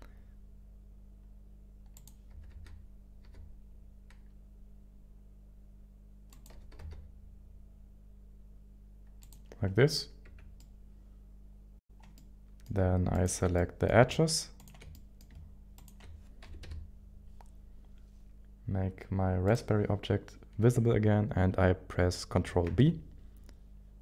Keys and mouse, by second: 1.9 click, 2.3 s, 2.7 y, 3.2 x, 6.3 click, 6.8 g, 6.8 x, 9.2 click, 10.2 Tab, 10.6-11.7 middle drag, 12.1 middle click, 13.2 shift+click, 13.5 middle click, 14.6 shift+click, 14.9 middle click, 16.4 KP_1, 16.6 KP_7, 19.5 click, 22.7 ctrl+b.